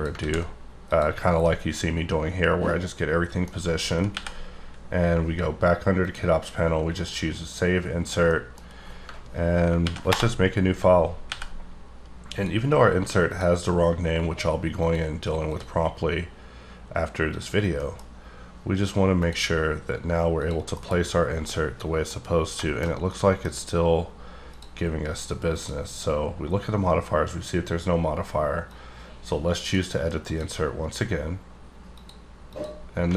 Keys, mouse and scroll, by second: 0.1 ctrl+click, 0.2 ctrl+a, 0.9 click, 1.2 scroll down 5, 1.4 middle click, 1.9 middle click, 4.1 n, 5.9 click, 7.0 click, 8.3 middle click, 9.8 ctrl+n, 10.1 Return, 10.9-11.3 scroll up 3, 11.3 n, 12.4 click, 13.2 click, 14.8 click, 15.5 click, 17.3 click, 17.7 middle click, 18.0-19.2 scroll up 3, 19.2 click, 20.4 click, 20.8 KP_Decimal, 21.0-21.4 scroll up 3, 21.4 middle click, 22.1 scroll up 4, 22.6 middle click, 23.1 middle click, 23.5 scroll up 2, 24.0-24.5 scroll down 6, 24.5 click, 25.5 click, 28.7 click, 30.3 click, 30.9 scroll down 1, 31.1-31.9 scroll up 1, 31.9 click, 32.4 click.